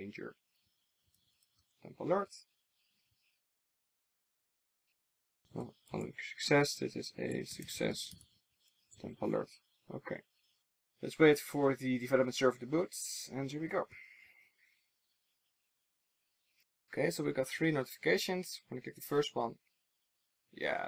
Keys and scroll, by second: 3.9 super+d, 8.9 super+s.